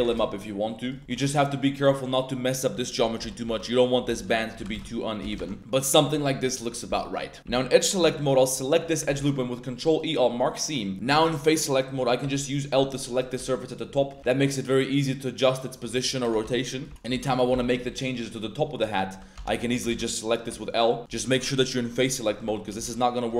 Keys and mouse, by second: 0.8 shift+click, 1.0 middle click, 1.0 Tab, 1.1 middle click, 1.4 middle click, 1.9 click, 3.2-4.7 typing, 3.6 click, 5.3 Tab, 5.4-5.9 drag, 5.9 middle click, 6.1-6.4 middle drag, 6.6-7.1 middle drag, 7.4 3, 8.0 alt+2, 8.2 alt+drag, 9.1 ctrl+e, 10.2 middle drag, 10.9 3, 11.2 a, 12.2 l, 13.0 middle click, 13.3 shift+middle drag, 13.5 drag, 13.9 click, 14.1 r, 16.0 click, 16.0 y, 16.4 x, 16.7 click, 16.8 Tab, 16.9 Tab, 16.9 click, 17.1 Tab, 17.5 1, 17.7 a, 18.2 drag, 18.7 Tab, 19.1-20.4 typing, 19.3 Tab, 20.7 click, 22.4 1, 22.7 a, 22.8 a.